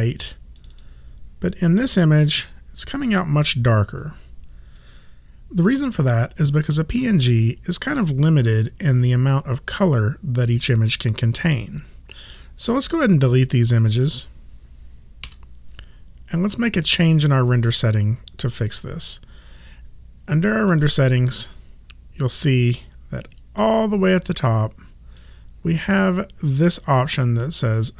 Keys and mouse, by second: 0.5 click, 4.8 click, 13.8 shift+click, 15.2 Delete, 17.7 click, 20.7 click, 23.6 click.